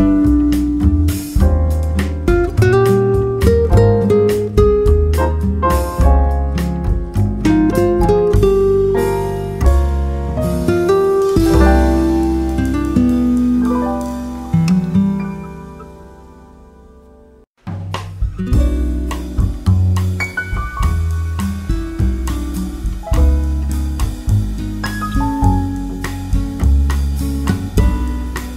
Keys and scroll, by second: 20.6 Right.